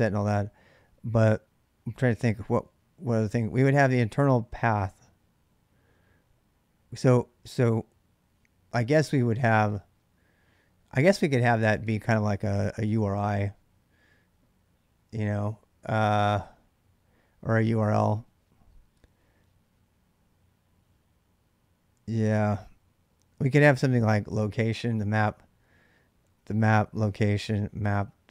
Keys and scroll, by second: 26.6-27.6 typing.